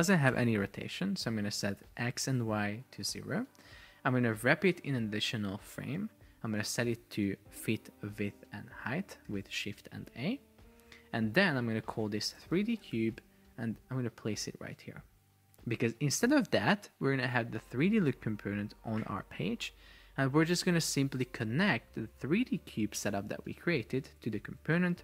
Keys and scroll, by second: 0.8 Return, 4.8 alt+super+Return, 9.4 shift+a, 11.6 super+r, 12.3 shift+d, 12.5 space, 12.6 shift+c, 13.1 Return.